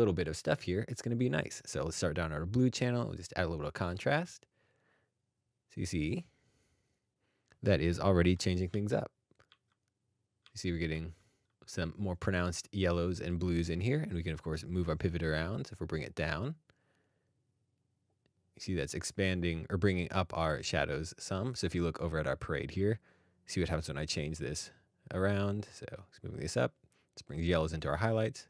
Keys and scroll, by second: 7.7-8.3 scroll, 8.7 alt+d, 9.5 alt+d, 10.4 alt+d, 10.9 alt+d, 11.4 alt+d.